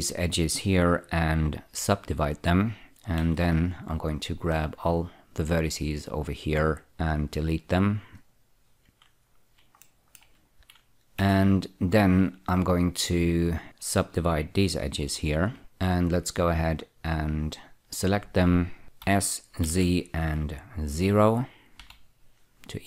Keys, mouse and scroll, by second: 3.5 1, 4.6-6.2 drag, 6.8 x, 8.5 click, 9.5 scroll up 2, 10.1 shift+middle click, 11.5 2, 12.7 click, 15.6 <, 15.9 click, 17.1 shift+click, 18.0 shift+click, 19.4 s, 20.0 z, 22.1 0.